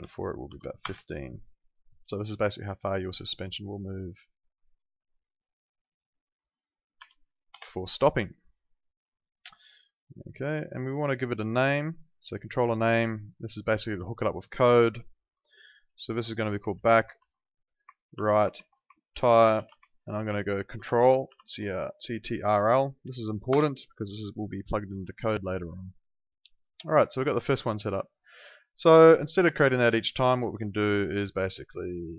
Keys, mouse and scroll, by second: 0.0 1, 0.5 5, 0.9 Return, 0.9 KP_Enter, 2.3 click, 7.0 0, 7.5 Return, 9.1 click, 16.8-22.0 typing, 23.5 Return, 23.5 KP_Enter, 25.9 click, 31.6 right click.